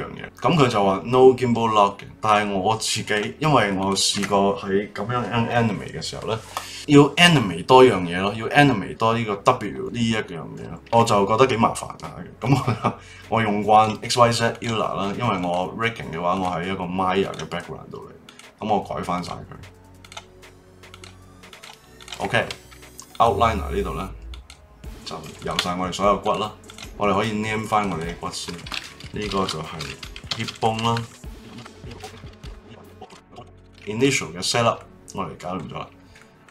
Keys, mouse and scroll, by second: 3.0 click, 3.8 click, 12.4-14.6 drag, 15.4-17.3 drag, 18.2-20.0 drag, 20.9-22.0 drag, 22.9 middle click, 23.1 click, 24.3 click, 25.4 shift+click, 26.2 click, 26.6 click, 27.6 click, 27.8-31.0 drag, 31.2 click, 31.5 e, 31.7 click, 31.9 l, 32.0 BackSpace, 32.5 click, 32.7 click, 33.0 l, 33.5 click, 33.6-34.1 scroll down 2, 34.1-36.5 shift+middle drag.